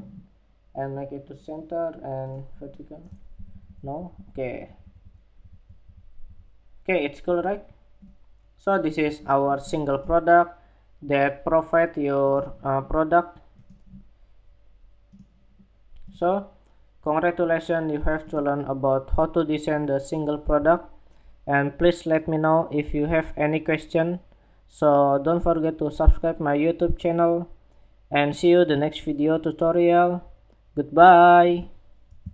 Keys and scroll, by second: 32.1 shift+super+2.